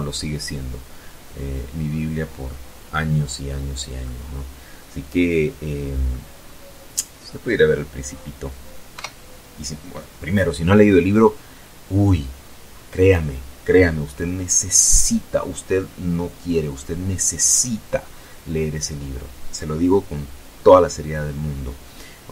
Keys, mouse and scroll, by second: 1.4 scroll down 1, 1.7 middle click, 2.2-4.0 drag, 4.2 scroll up 1, 6.7 KP_0.